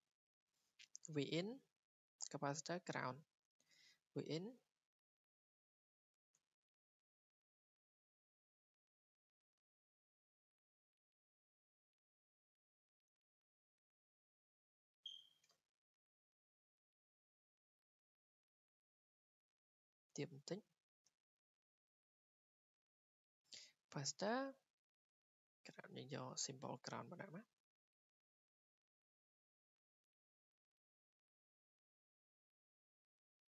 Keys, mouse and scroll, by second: 2.7 click, 3.4 Escape, 6.1 click, 6.5 Escape, 8.1 click, 9.2 click, 9.5 Escape, 10.6 w, 11.4 click, 12.9 Escape, 14.0 click, 14.9 click, 16.0 Escape, 16.6 click, 17.5 click, 17.7 Escape, 17.9 Escape, 18.1 Escape, 18.3 Escape, 18.9 click, 19.7 click, 19.9 click, 21.1 w, 21.7 click, 22.7 click, 23.3 Escape, 25.5 click, 27.1 click, 27.5 Escape, 27.6-28.0 scroll, 28.4 w, 29.1 click, 29.7 click, 30.0 Escape, 31.2 scroll, 31.6 Escape, 32.6 scroll, 33.2 middle click.